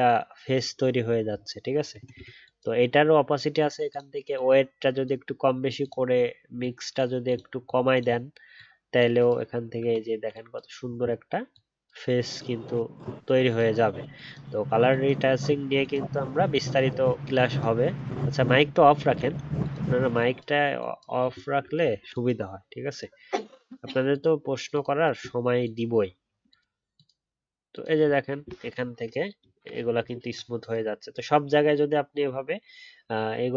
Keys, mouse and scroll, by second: 29.0 alt+scroll down 1, 29.9 alt+scroll down 1, 29.9-30.3 alt+scroll up 1, 31.1 alt+scroll up 6, 31.2 alt+scroll down 1, 31.4-31.8 alt+scroll up 1.